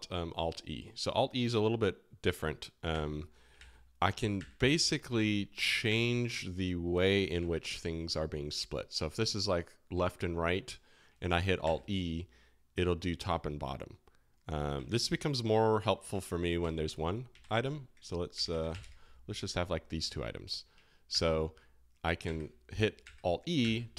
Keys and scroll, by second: 2.9 alt+e, 3.5 alt+e, 4.3 alt+e, 5.1 alt+e, 5.8 alt+e, 7.3 alt+e, 11.6 alt+e, 14.7 alt+e, 16.3 alt+k, 16.6 alt+l, 17.4 alt+k, 18.1-19.2 typing, 21.1 alt+e, 22.2 alt+e, 23.0 alt+e.